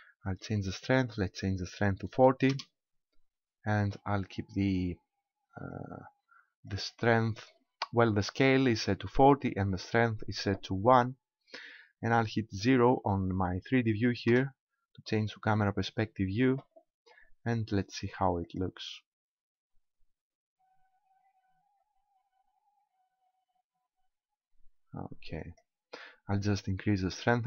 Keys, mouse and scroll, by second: 5.7 click, 14.3 KP_0, 15.4-16.1 scroll down 4, 18.4 click, 25.4 click, 27.3 click.